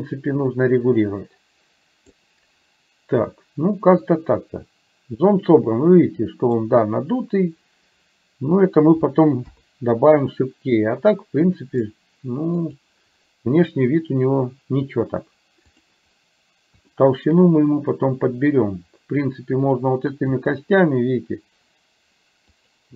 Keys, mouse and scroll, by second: 4.1-6.6 middle drag, 9.5 KP_3, 12.6 click, 15.8 click, 16.9 shift+middle click, 20.3 s.